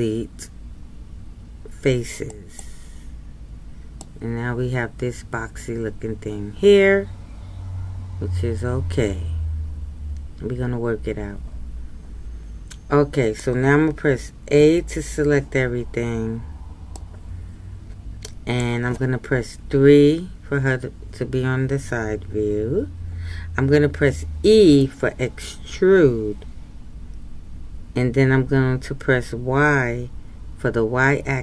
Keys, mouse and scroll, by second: 4.0-7.0 middle drag, 17.1-19.6 middle drag, 19.6 KP_3, 24.5 e.